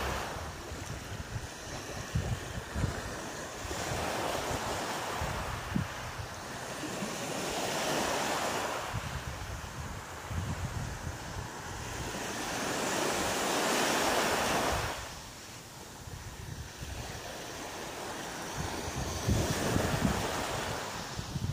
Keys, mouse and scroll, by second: 0.1 shift+right click, 0.6 shift+middle click, 1.7 shift+right click, 2.5 shift+right click, 3.6 shift+right click, 3.6 shift+middle click, 5.4 g, 7.3 click, 7.8 right click, 8.5 shift+right click, 9.0 right click, 13.2 middle click, 16.7 middle click, 21.0 ctrl+z, 21.3 ctrl+z.